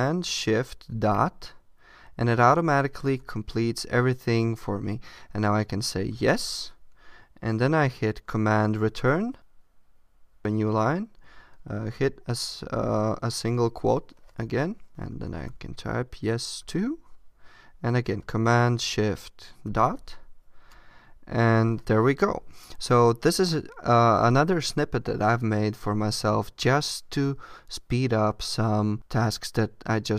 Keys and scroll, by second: 8.7 super+Return.